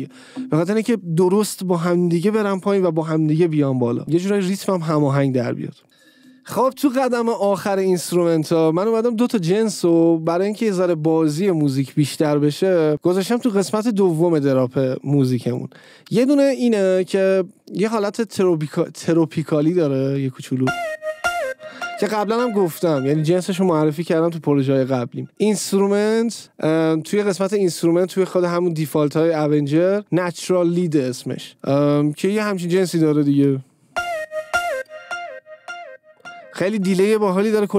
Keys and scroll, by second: 20.5 space, 22.3 space, 33.8 space, 35.2 space.